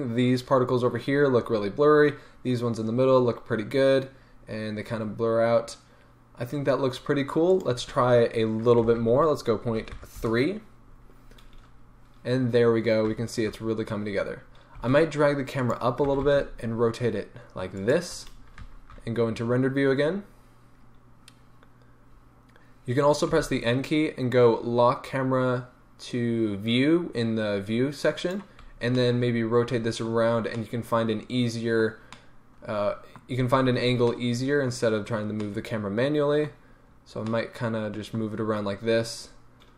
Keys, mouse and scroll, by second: 10.2 Return, 13.0 z, 14.8 g, 16.0 r, 16.7-17.9 drag, 16.7-17.9 middle drag, 18.6 z, 22.0 n, 28.2 click, 28.9-39.7 middle drag.